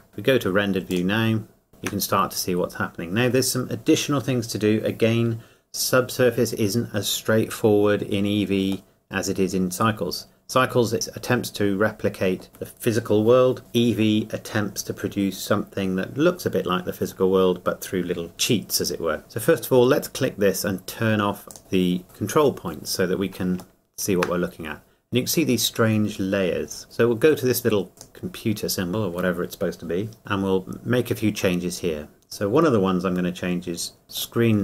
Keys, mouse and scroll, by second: 1.1 click, 1.7 shift+middle click, 7.6 scroll up 1, 8.9 middle click, 21.5 click, 23.5 click, 23.8 shift+middle click, 26.8 click, 27.9 click, 34.1 click.